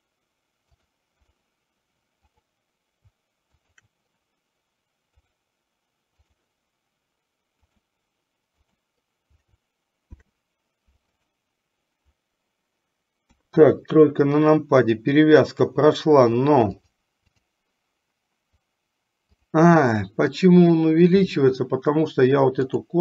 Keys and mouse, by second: 0.8 click, 3.8 shift+click, 5.3-6.8 drag, 7.8 click, 8.7 click, 10.2 ctrl+p, 13.4 KP_3, 16.9 click, 19.6 click, 22.9 click.